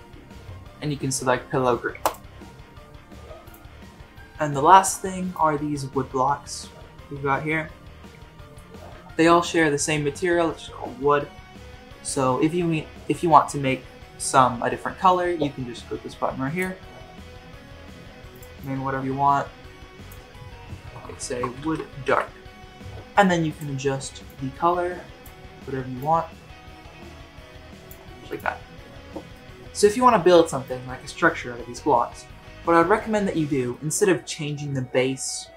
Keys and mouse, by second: 5.8-8.5 middle drag, 16.5 click, 18.3-22.1 drag, 23.5 click, 29.3 middle drag, 29.6 KP_1, 33.7 shift+middle drag.